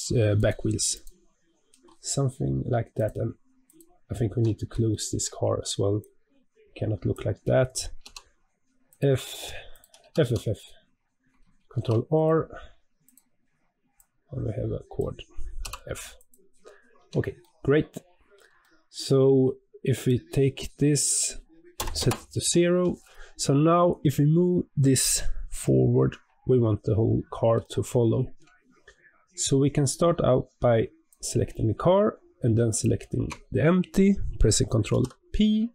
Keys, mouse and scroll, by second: 0.8 click, 2.9 click, 3.6 click, 4.2 Tab, 4.8 shift+middle click, 5.2-5.9 scroll up 2, 5.9 click, 7.9 f, 8.8 click, 9.6 shift+click, 9.9 f, 10.1 f, 11.6 ctrl+r, 13.9 click, 15.5 f, 16.1 click, 16.6 scroll down 3, 16.9 Tab, 17.3-19.9 middle drag, 19.9 click, 20.9-23.9 drag, 27.5-30.6 shift+middle drag, 31.0 click, 32.6 shift+click, 34.8 ctrl+p.